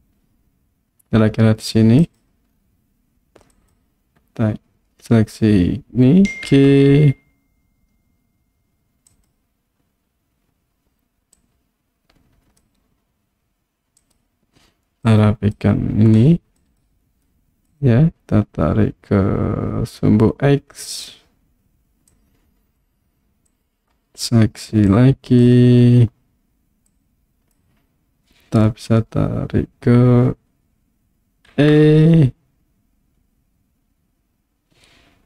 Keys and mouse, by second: 2.0 click, 3.7 click, 6.5 g, 9.1 click, 11.4-12.6 drag, 15.1 click, 16.7 click, 17.8-21.1 drag, 22.1 click, 23.6 click, 24.9 click, 26.9 click, 31.6 e.